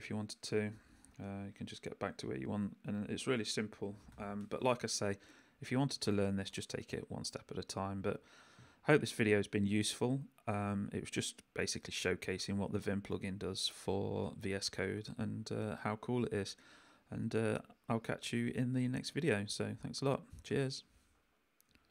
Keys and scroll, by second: 0.0 u, 1.1 j, 1.5 u, 2.8 j, 3.5 k.